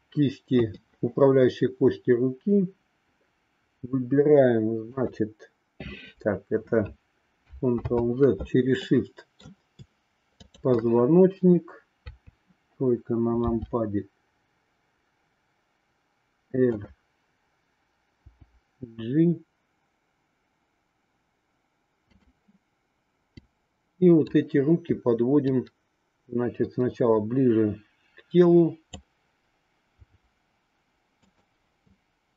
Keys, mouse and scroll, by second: 4.9-6.4 drag, 7.7 ctrl+z, 8.9 middle click, 10.4-11.5 shift+drag, 12.0 KP_3, 13.5 r, 23.4-24.4 drag, 25.6-29.1 drag, 30.0 r.